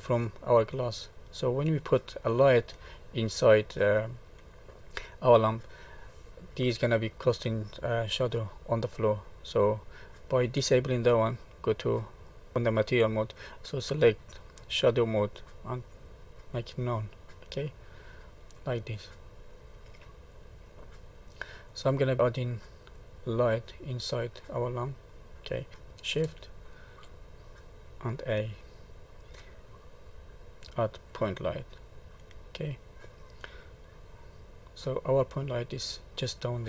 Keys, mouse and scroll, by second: 0.9 middle click, 7.2 middle click, 9.3 middle click, 12.5 click, 14.9 click, 17.6 middle click, 18.8 middle click, 20.4-20.9 scroll down 1, 20.9 middle click, 22.0 middle click, 24.4 middle click, 26.2 shift+a.